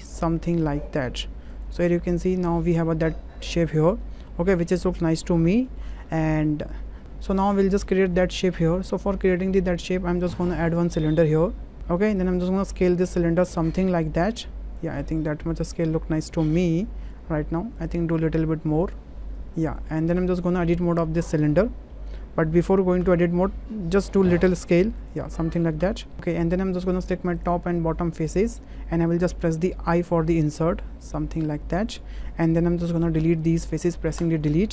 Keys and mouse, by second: 1.5 click, 1.9 click, 2.4 Tab, 3.9-4.4 drag, 4.4-5.2 middle drag, 5.6 shift+middle click, 6.1 middle click, 10.3 shift+a, 12.2 click, 13.4-14.8 drag, 15.1 middle drag, 15.3 w, 15.8-17.1 drag, 18.8 click, 20.2 Tab, 20.6 middle click, 23.0 Tab, 24.4 s, 25.0 click, 25.8 Tab, 27.4 click, 27.6 middle click, 28.6 middle click, 31.9 click, 33.4 Delete.